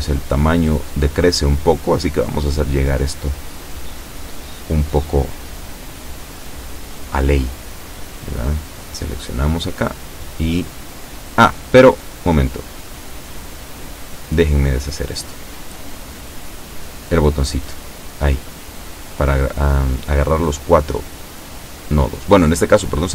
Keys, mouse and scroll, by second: 2.7 click, 3.3-3.7 scroll down 2, 4.3 shift+middle click, 5.1-5.7 shift+scroll up 4, 5.8 shift+middle click, 6.7 shift+a, 7.0 b, 7.6 click, 9.4 g, 11.4 click, 13.3 ctrl+z, 16.5 click, 17.3 b, 17.5 click, 20.1 g, 21.1 click, 22.1 a, 22.4 b, 22.9 click.